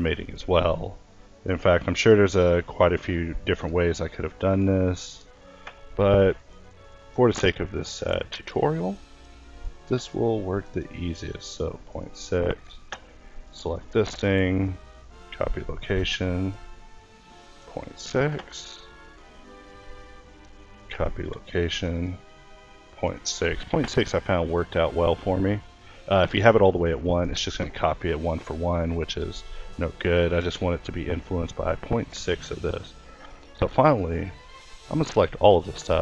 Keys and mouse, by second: 0.9-5.5 drag, 5.5 a, 5.9 click, 8.5 ctrl+s, 12.5 a, 13.9 ctrl+s, 18.1 a, 19.0 click, 19.7 ctrl+s, 23.5 a, 23.9 click, 26.1 ctrl+s, 31.3 a, 33.9 a, 34.0 a, 34.4 a, 35.5 alt+g.